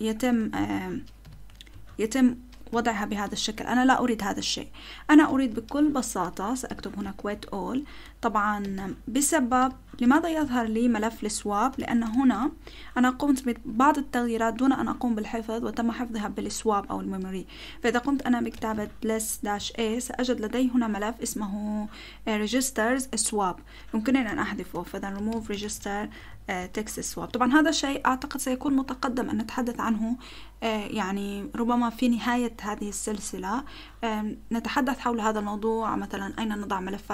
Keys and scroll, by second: 0.0-1.2 typing, 1.7 Return, 2.4-3.4 typing, 5.3 :, 6.6-7.0 typing, 8.6-10.4 typing, 10.8 Return, 11.4-13.3 typing, 17.4-18.7 typing, 19.5 Return, 23.8-26.7 typing.